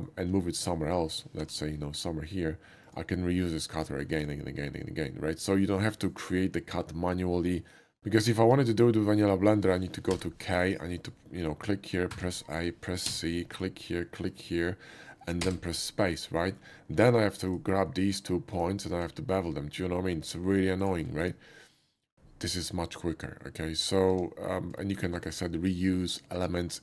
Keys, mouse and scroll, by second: 0.0 alt+middle click, 0.6 Tab, 1.4 g, 2.9 click, 4.2 ctrl+z, 4.6 middle click, 6.7 ctrl+z, 8.0 ctrl+z, 8.2 middle click, 8.9 middle click, 10.2 k, 12.1 a, 13.1 c, 13.5 click, 14.3 click, 15.4 space, 15.8 middle click, 16.9 Tab, 17.9 middle click, 18.6 shift+click, 19.2 ctrl+shift+b, 21.2 Tab, 21.7 middle click, 23.6 middle click, 24.8 shift+middle click, 25.2 Tab, 25.7 middle click.